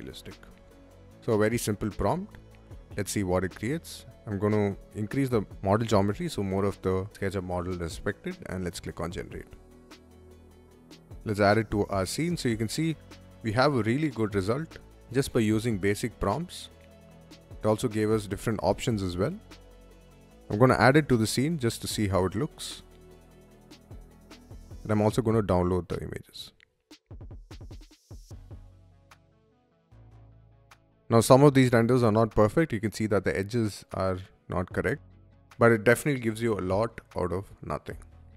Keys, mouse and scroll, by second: 3.1 click, 4.7-5.5 drag, 8.2 click, 9.6 click, 10.9 click, 13.2-14.2 drag, 15.1 click, 16.4 click, 20.6 click, 22.8 click, 24.4 click, 25.5 click, 26.7 click, 27.3 click, 28.8 click, 29.7 click, 33.8 click.